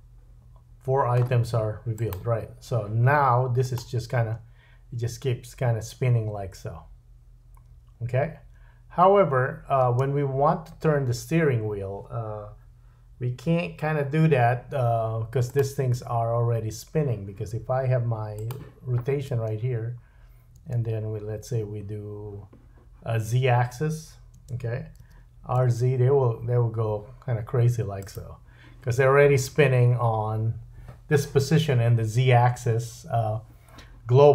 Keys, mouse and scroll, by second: 1.7 click, 2.1-3.6 drag, 4.2 space, 9.8 space, 15.6-18.3 drag, 19.3 space, 20.6 space, 24.3 space, 25.0 r, 28.1-34.3 drag, 32.5 space.